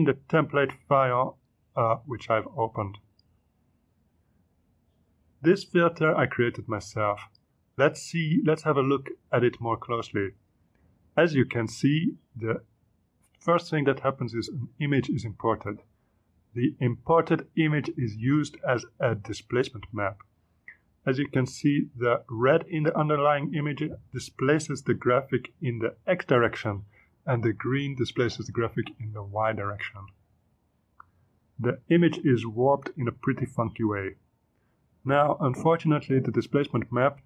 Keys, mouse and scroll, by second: 0.0 click, 3.0 click, 6.8 space, 7.3 space, 7.6 click, 9.5 click, 10.2 click, 11.0 click, 15.4 click, 17.7-19.6 drag, 24.0 click, 26.0 click.